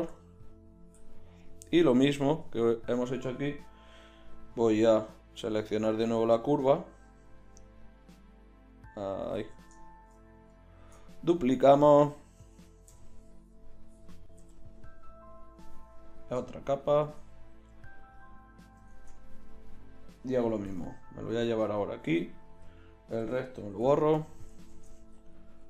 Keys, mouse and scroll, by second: 1.6 z, 4.6-9.8 drag, 9.4 ctrl+z, 10.8 shift+d, 12.9 m, 14.4 m, 19.0 Tab, 20.7 g, 23.2 ctrl+i, 23.7 x, 24.7 shift+Tab, 25.2 click, 25.6 z.